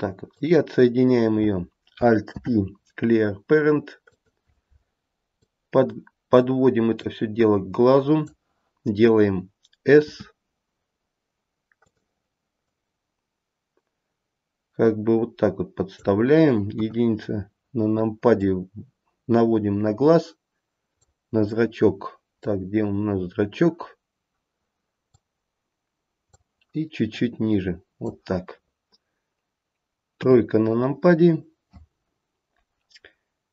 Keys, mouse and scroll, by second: 0.4 click, 2.4 alt+p, 5.5 click, 7.1 click, 12.7 click, 16.9 KP_1, 18.5 click, 22.4 middle click, 23.4-24.0 scroll up 1, 24.0-24.7 scroll down 1, 25.3 click, 27.2 click, 30.3 KP_3, 31.3-33.4 scroll down 1, 33.4-33.5 scroll down 1.